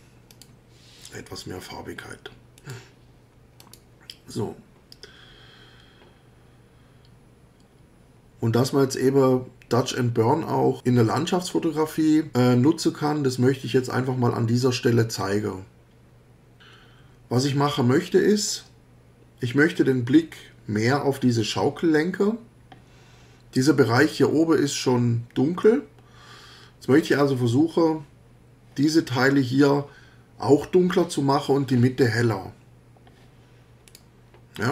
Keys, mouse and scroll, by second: 0.3 click, 2.6 click, 3.6 click, 33.9 click.